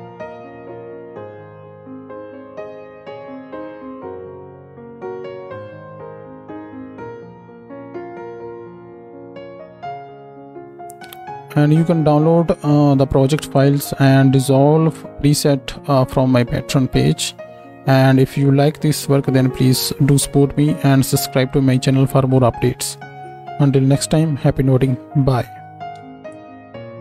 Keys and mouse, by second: 6.1-27.0 drag, 6.1-27.0 right drag, 25.9 KP_0.